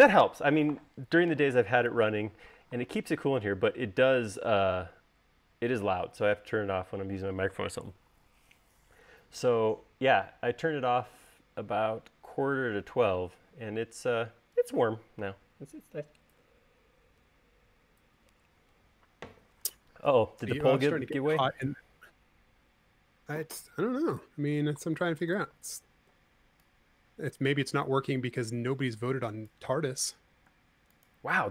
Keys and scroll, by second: 26.3 s, 31.4 space.